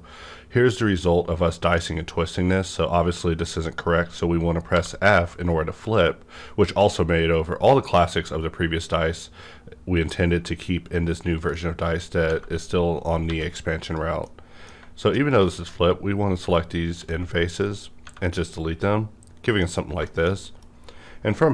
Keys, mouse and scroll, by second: 4.7 click, 4.7 f, 9.9 click, 10.0 click, 10.0 f, 11.0-11.5 scroll down 1, 11.5-13.3 middle drag, 12.2 Tab, 13.2 3, 13.8 click, 14.3-16.9 middle drag, 16.9 x, 18.0 Tab, 18.3-19.9 middle drag, 19.7 scroll down 1, 20.0 shift+middle click, 20.3 shift+middle click, 20.3 scroll down 1, 20.4 shift+middle click.